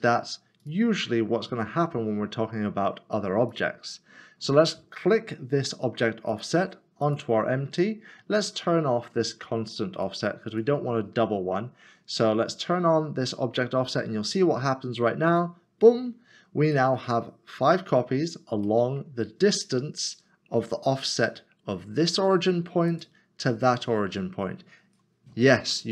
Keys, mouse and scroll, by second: 0.6 click, 3.5 click, 6.3 click, 9.9 click, 15.3 click, 16.7 click, 16.8 middle click, 18.4 scroll down 1, 18.8 middle click, 22.9 middle click, 23.0 click.